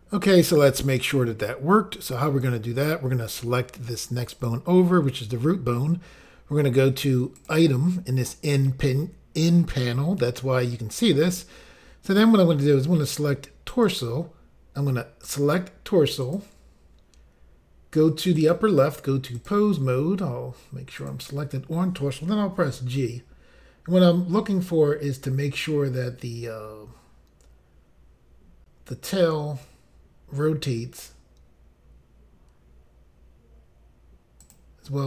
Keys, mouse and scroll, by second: 4.3 click, 4.4 click, 7.3 click, 7.5 click, 13.7 click, 13.8 click, 15.2 click, 15.4 click, 16.2 click, 16.3 click, 18.3 click, 18.5 click, 19.4 click, 19.5 click, 21.1 click, 34.4 click, 34.5 click.